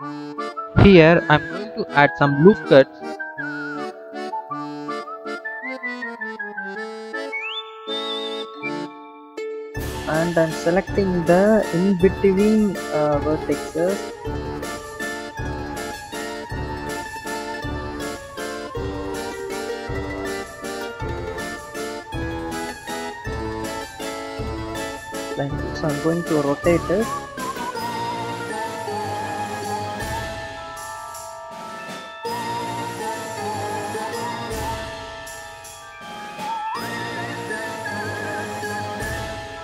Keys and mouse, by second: 0.7 ctrl+r, 8.8-10.0 drag, 10.8 click, 12.9 shift+click, 14.1 shift+click, 15.1 shift+click, 15.6 shift+click, 16.0 shift+click, 16.5 shift+click, 17.5-18.5 drag, 19.2 click, 19.8 click, 20.8 click, 21.4 click, 22.2-24.6 drag, 25.2 ctrl+z, 25.8 r, 28.3 shift+click, 29.8 click, 29.9 click, 30.7 r, 33.1 r, 34.3 r, 34.8 click, 36.1 click, 36.3 alt+click, 36.7 click, 37.7 click, 38.3 r.